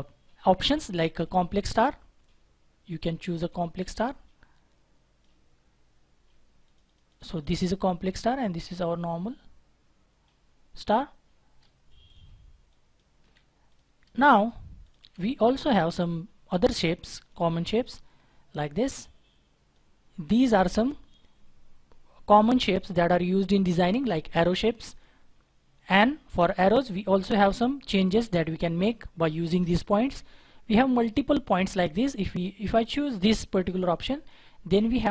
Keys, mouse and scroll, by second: 6.9 double click, 13.0 Delete, 14.0 Delete, 14.8 double click, 15.0 Delete, 34.7-35.1 scroll down 1.